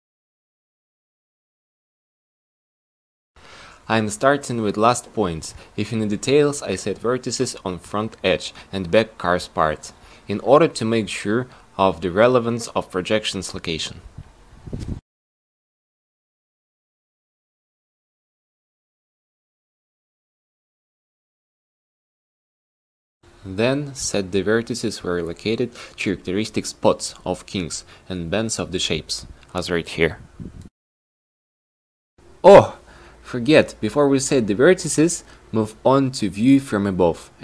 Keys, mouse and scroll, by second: 1.2 click, 2.5 a, 2.8 c, 5.9 ctrl+z, 6.8 a, 7.1 a, 12.5 a, 12.8 c, 13.3-15.5 drag, 16.7 a, 16.9 c, 18.5-20.1 drag, 20.6 a, 20.9 c, 22.3 ctrl+r, 35.6 q.